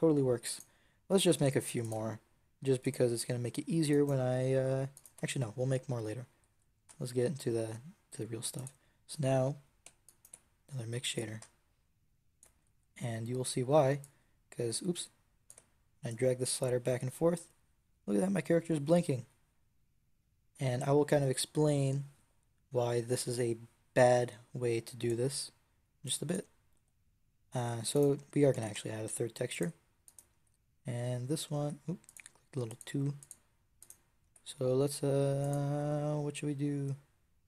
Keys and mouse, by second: 1.0 shift+d, 5.0 x, 6.7 shift+a, 10.5 click, 11.8-13.9 drag, 14.5-15.7 drag, 25.9-28.4 drag, 28.4 shift+d, 30.2 Tab, 31.5 Tab, 34.1 Tab.